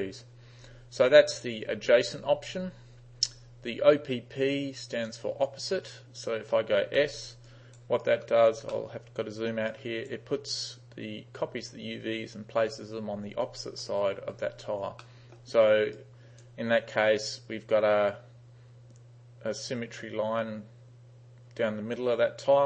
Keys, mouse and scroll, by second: 5.1 click, 7.1 s, 7.5 right click, 8.1 right click, 8.8-9.5 middle drag, 9.8 right click, 15.1-15.4 middle drag, 16.0 right click.